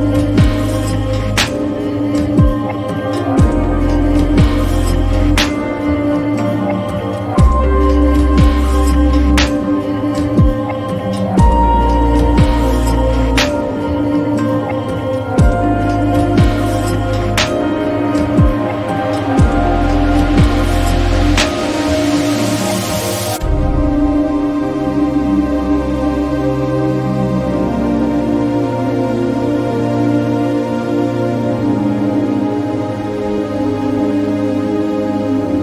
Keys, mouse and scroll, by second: 5.6-19.0 drag, 5.6 typing, 17.5 typing, 22.3 click, 24.7 click, 24.7 typing, 29.2 click, 29.2-35.6 drag.